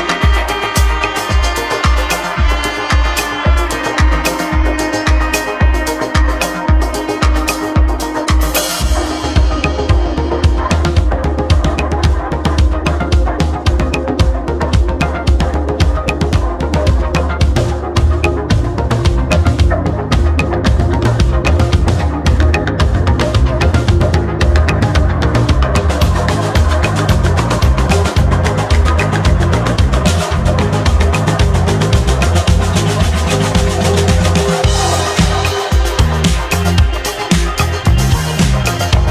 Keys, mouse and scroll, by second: 1.5 Tab, 2.1 Tab, 4.7-6.6 drag, 7.4-9.5 shift+middle drag, 9.5 click, 10.3-11.3 shift+middle drag, 11.3-12.0 scroll down 2, 12.0-13.4 middle drag, 13.4-14.3 scroll down 7, 14.3-14.8 scroll up 4, 14.8-17.3 middle drag, 17.5 click, 18.1 click, 18.5 click, 19.1 click, 19.5-20.1 scroll up 1, 20.1 shift+middle click, 20.7 Tab, 22.0 click, 23.4 click, 24.3 Tab, 27.3 ctrl+a, 28.3 ctrl+a, 29.5 click, 30.0 click, 30.4 click, 30.7 click, 31.1 click, 31.8 click, 32.5 click, 33.0 click, 33.5 click, 33.9 click, 34.2 click, 34.6 click, 37.0-37.3 scroll down 2, 37.3-38.3 scroll up 1, 38.7-39.1 drag, 38.7-39.1 scroll down 2.